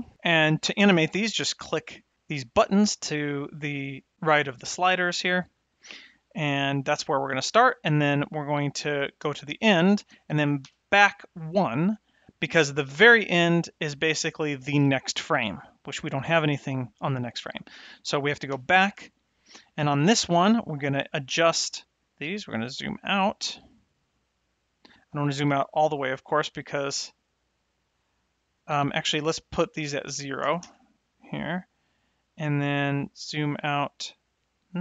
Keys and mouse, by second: 9.2 shift+Right, 10.6 Left, 12.9 Right, 18.5 Left, 22.0-28.7 drag, 29.3-31.3 drag, 32.1-34.1 drag.